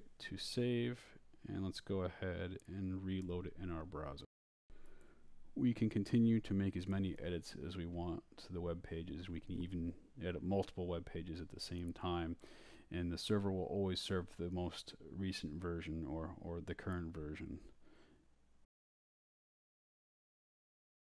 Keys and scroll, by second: 1.2 Return, 5.7 Up, 6.1 Return, 6.8 Down, 8.4-11.1 typing, 13.9-21.1 typing.